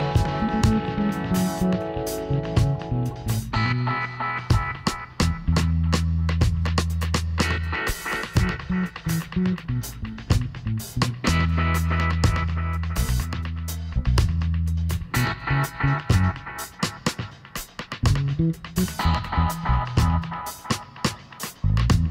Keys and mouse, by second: 2.8 g, 5.2 r, 8.3-10.4 middle drag, 10.4-12.1 drag, 14.3-18.4 middle drag, 18.4 r, 21.1 middle click, 21.6 middle click.